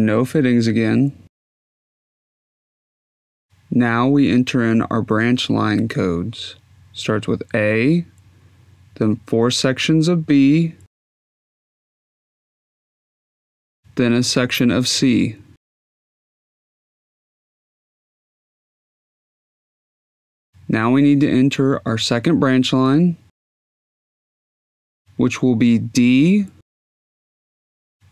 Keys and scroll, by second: 4.9 shift+a, 6.4 Tab, 7.0 b, 8.0 Tab, 8.6 b, 9.4 Tab, 9.9 b, 10.7 Tab, 11.4 b, 12.2 Tab, 12.9 b, 14.1 BackSpace, 14.6 c.